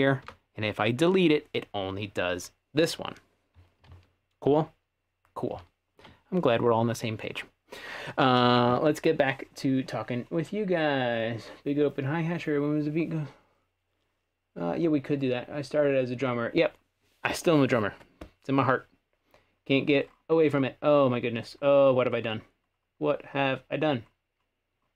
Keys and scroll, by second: 0.2 Delete, 3.9 super+z, 4.5 super+z, 5.5 super+z.